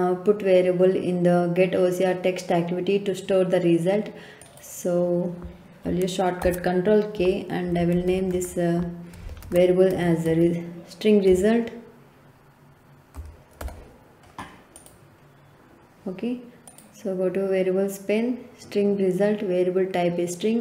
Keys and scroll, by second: 6.4 ctrl+k, 7.5-11.2 typing, 13.1 l, 13.6 t.